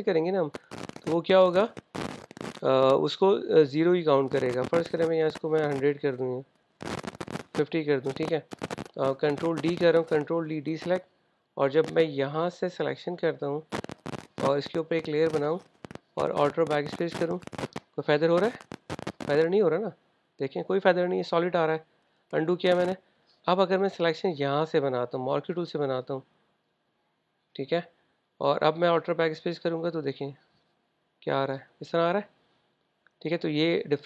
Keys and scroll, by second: 10.9 super+d, 17.4 alt+BackSpace, 22.2 super+z, 29.9 alt+BackSpace, 32.7 super+z, 33.1 super+z.